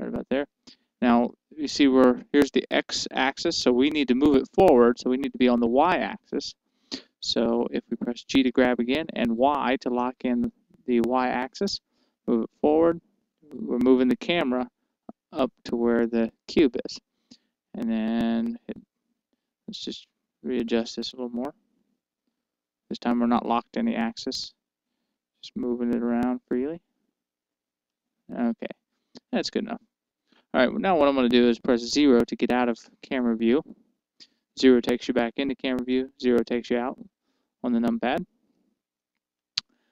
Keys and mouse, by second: 1.7-3.6 drag, 10.3 g, 18.2-21.1 drag, 21.9 g, 30.5-33.1 drag, 34.5 KP_0, 35.7-37.6 middle drag, 37.4 KP_0, 38.6 KP_0.